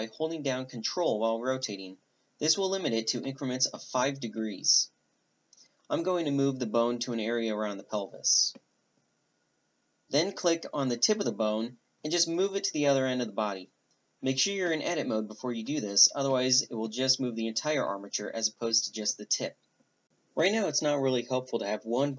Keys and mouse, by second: 1.6 g, 3.4 r, 6.2 Tab, 6.6 right click, 12.2 right click, 12.6-14.4 drag, 15.1-16.8 drag, 16.8-22.1 right drag.